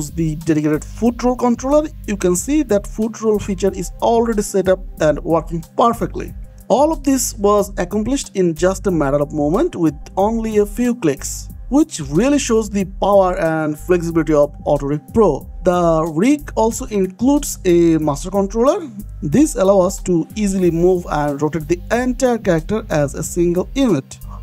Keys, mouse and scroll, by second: 0.1 middle click, 1.2 click, 2.0 middle click, 3.7 g, 7.8 Escape, 8.9 click, 9.3-9.6 scroll down 1, 9.6 middle click, 11.0 g, 14.4 Escape, 14.7 middle click, 15.5 shift+middle click, 17.9 click, 18.7-19.0 scroll down 1, 19.0 g, 20.1 Escape, 20.6 click, 21.2-22.1 scroll up 1, 22.2 middle click, 24.2 ctrl+Tab.